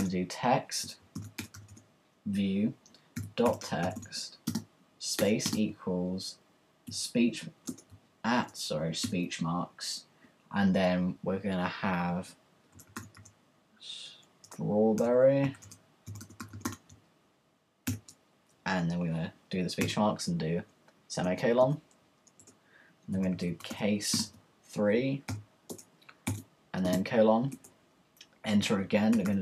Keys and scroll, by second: 0.0-2.2 typing, 3.2-5.2 typing, 6.9 typing, 8.1-9.0 typing, 10.3 typing, 12.7-17.9 typing, 21.3 Return, 22.9-26.8 typing, 27.5 Return, 28.9-29.4 typing.